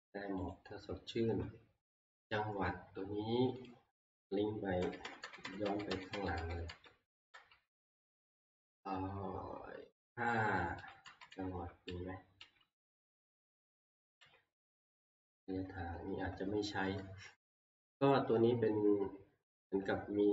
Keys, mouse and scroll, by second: 3.7 click, 4.8 ctrl+Page_Down, 5.0 ctrl+Page_Down, 5.2 ctrl+Page_Down, 5.4 ctrl+Page_Down, 5.6 ctrl+Page_Down, 5.9 ctrl+Page_Down, 6.1 ctrl+Page_Down, 6.3-7.6 drag, 6.4 ctrl+Page_Down, 6.7 ctrl+Page_Down, 7.1 ctrl+Page_Down, 7.3 ctrl+Page_Down, 10.7 ctrl+Page_Down, 11.0 ctrl+Page_Down, 11.3 ctrl+Page_Down, 11.6 ctrl+Page_Down, 11.8 ctrl+Page_Down, 12.4 ctrl+Page_Down, 13.2 ctrl+Page_Down, 14.2 ctrl+Page_Down.